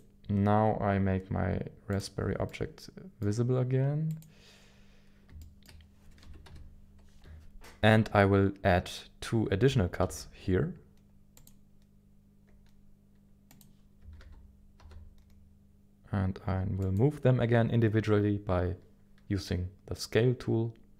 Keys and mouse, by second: 1.9 click, 2.5 middle click, 5.4 shift+middle click, 6.2 KP_1, 6.5 KP_7, 7.2 ctrl+z, 10.0 ctrl+r, 13.5 click, 14.0 s, 14.8 y, 14.8 x, 16.8 click.